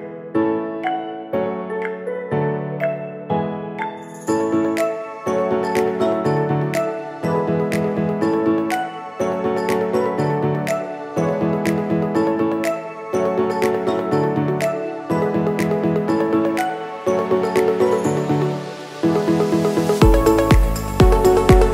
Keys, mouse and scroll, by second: 0.8-10.9 drag.